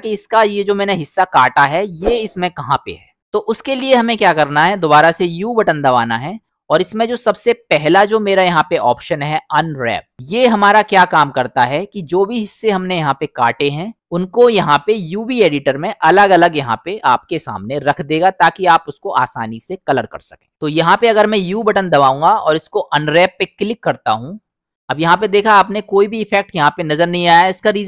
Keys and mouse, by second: 3.2 u, 3.4 middle click, 5.6 u, 11.7 click, 12.6 middle click, 21.5 u.